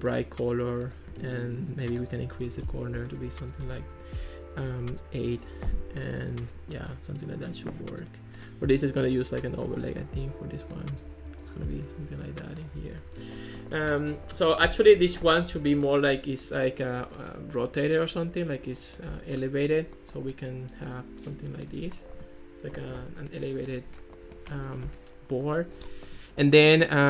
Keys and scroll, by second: 3.0 4, 3.2 Return, 4.7 8, 4.9 Return.